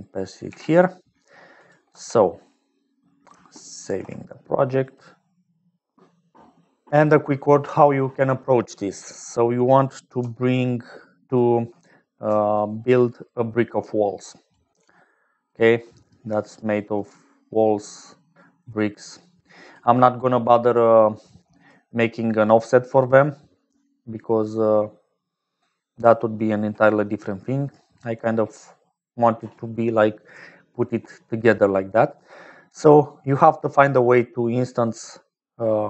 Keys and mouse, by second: 0.4 ctrl+v, 1.6 click, 1.8 x, 3.8 ctrl+s, 10.7-11.8 drag, 11.8-26.6 typing, 12.5-15.4 drag, 15.8-17.4 drag, 19.0 click, 21.2 click, 22.3-26.9 drag, 24.0-26.9 middle drag, 24.0-26.9 right drag, 27.7 click, 32.8-35.8 typing, 33.0-34.9 drag.